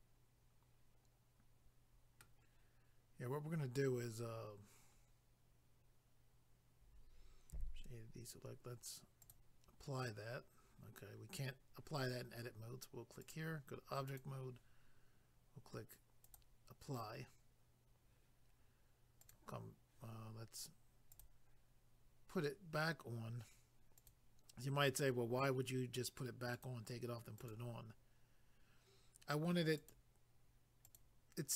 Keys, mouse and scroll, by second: 5.0 scroll down 1, 7.5 a, 9.2 click, 9.3 click, 13.2 click, 13.3 click, 14.1 click, 14.2 click, 16.2 click, 16.3 click, 19.2 click, 19.3 click, 19.9 click, 21.1 click, 21.2 click, 24.0 click, 24.1 click, 26.5 click, 26.7 click, 27.4 click, 27.5 click, 29.8 click, 29.9 click, 30.8 click, 30.9 click.